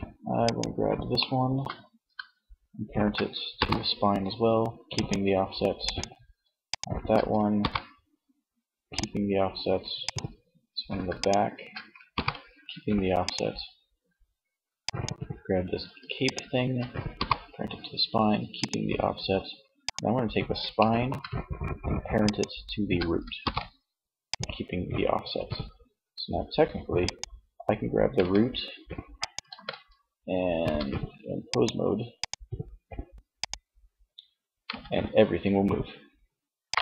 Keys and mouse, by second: 1.5-2.7 middle drag, 2.7 ctrl+p, 6.6 ctrl+p, 9.1-10.2 drag, 11.1 ctrl+p, 16.2 ctrl+p, 22.5 ctrl+p, 26.2-27.8 right drag, 27.2 g, 28.7 ctrl+z, 29.7 Tab, 33.7 g, 35.7 click, 36.2 ctrl+z.